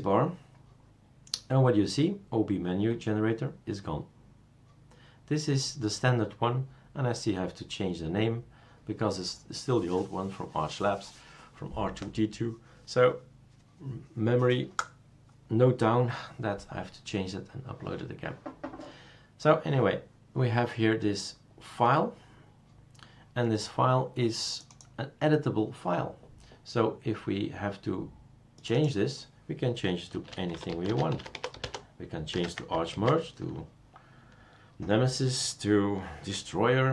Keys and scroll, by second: 29.9-32.1 typing, 32.9 ctrl+s.